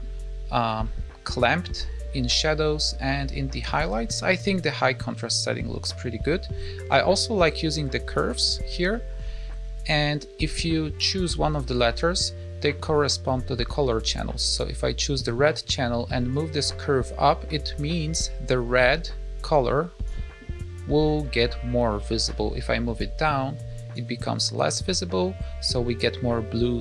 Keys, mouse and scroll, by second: 6.1-6.8 scroll down 3, 6.8 click, 7.2-8.1 scroll down 5, 8.1 click, 8.1-9.9 scroll down 11, 14.4 click, 16.2 click, 22.2 click.